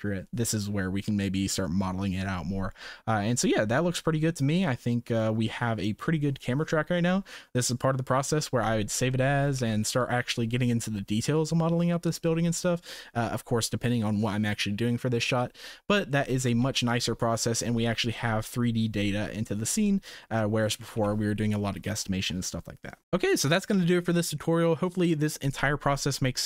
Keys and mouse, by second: 3.7-4.2 shift+middle drag, 9.2 shift+middle click, 9.6 ctrl+s, 9.9 space, 16.1 shift+middle drag, 16.6 ctrl+s, 17.0-17.5 middle drag, 18.1-18.8 middle drag, 19.8 middle drag, 20.4-20.7 shift+middle drag, 20.9 ctrl+s, 23.0 ctrl+s, 23.0 space.